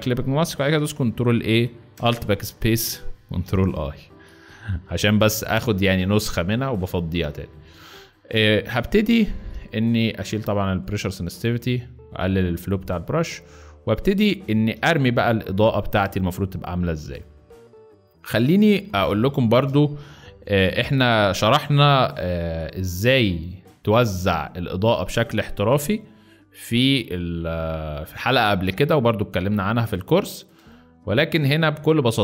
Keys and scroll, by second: 0.4 ctrl+a, 1.8 alt+BackSpace, 2.8 ctrl+alt+BackSpace, 3.3 ctrl+alt+i, 4.5 b, 9.5 ctrl+z, 13.8 z, 17.4 z, 18.4 space, 20.2-21.6 typing, 25.0 space, 30.5 space, 31.2 space.